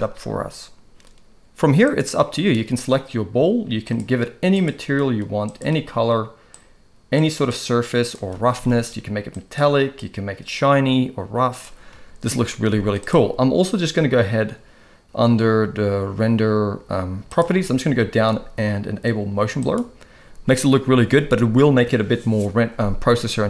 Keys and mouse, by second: 1.9 click, 3.9-4.3 drag, 4.5 click, 6.5 click, 7.5 click, 8.5 alt+a, 9.3 click, 10.0-11.7 drag, 11.5 space, 12.7 z, 17.4 click, 19.6-23.4 drag.